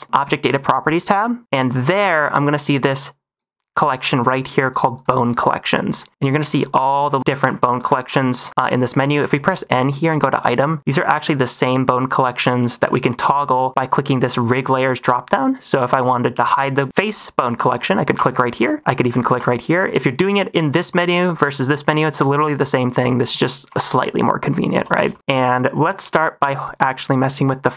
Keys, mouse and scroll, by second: 0.4 click, 1.7 click, 2.8 click, 4.9 click, 5.2 click, 5.5 click, 5.8 click, 9.1 n, 10.0 click, 11.0 click, 12.5 click, 14.2 click, 14.5 click, 16.9 shift+middle drag, 18.1 click, 18.5 click, 18.9 click, 19.3 click, 22.9 click, 23.2 n, 23.6 n, 24.6 n, 25.0 shift+middle click, 26.6 click.